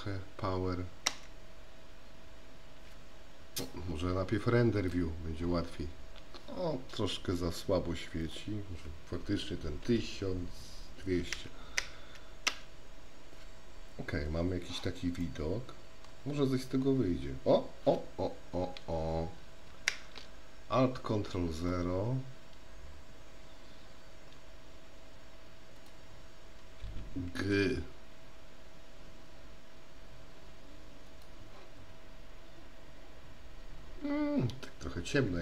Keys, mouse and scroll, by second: 5.0 click, 8.2-14.2 drag, 15.4-16.3 middle drag, 20.2 ctrl+alt+KP_0, 27.7 g.